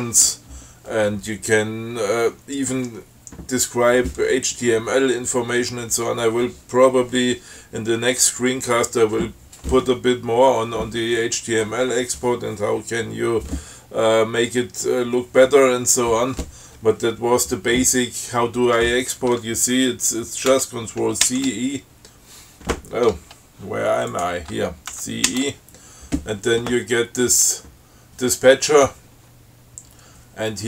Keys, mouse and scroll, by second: 0.4 scroll up 2, 20.8 ctrl+c, 21.5 ctrl+e, 24.4 click, 25.2 ctrl+c, 25.6 ctrl+e.